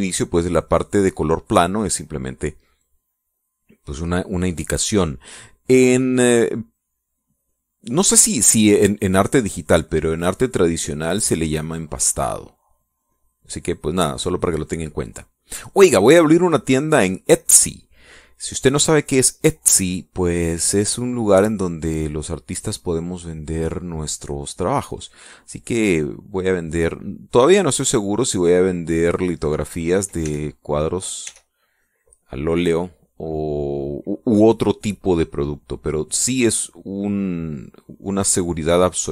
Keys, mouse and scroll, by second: 0.2-3.0 drag, 9.9-16.6 drag, 16.8-17.9 drag, 18.2 middle click, 18.4 click, 19.3-20.4 drag, 20.5 click, 27.0-28.0 drag, 28.2-30.3 drag, 31.0 e, 31.1-32.1 drag, 32.0 e, 36.0-38.8 drag, 38.8 middle click, 38.9 click.